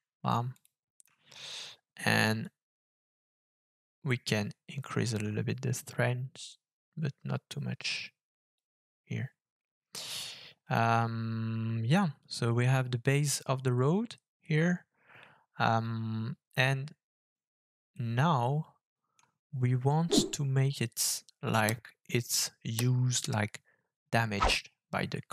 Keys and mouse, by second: 0.5 ctrl+shift+click, 2.4-8.6 drag, 18.0-19.3 middle drag.